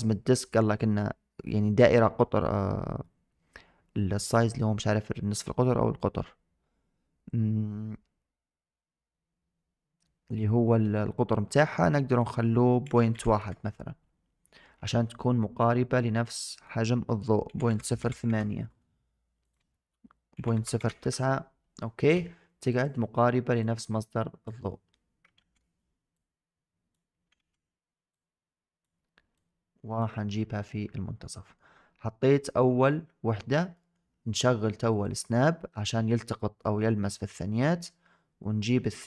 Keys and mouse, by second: 12.1-13.3 drag, 16.4-18.2 drag, 19.4-20.9 drag, 22.6 click, 23.8 click, 25.3 ctrl+z, 26.0 click, 26.2 click, 27.2 ctrl+z, 28.2 click, 29.2 click, 31.4 shift+middle click, 32.0 shift+middle drag, 32.5 shift+middle drag, 33.7 shift+middle drag, 34.9 click, 37.3-38.6 shift+middle drag.